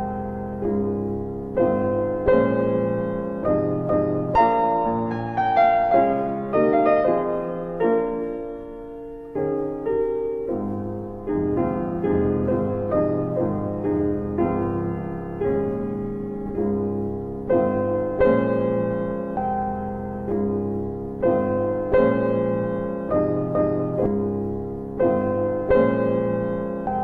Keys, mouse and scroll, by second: 1.2 alt+w, 1.6 alt+w, 2.4 alt+middle click, 4.0 shift+click, 10.1 click, 10.4 double click, 11.8 click, 18.6 alt+middle click, 19.1 middle click, 19.2-19.8 scroll down 2, 19.8-20.2 scroll down 2, 20.0 middle click, 20.8 alt+middle click, 20.9 scroll down 1, 21.2 middle click, 23.3 right click, 25.1 click, 25.1 alt+w, 26.1 alt+w, 26.7 middle click, 26.8-27.0 scroll down 1.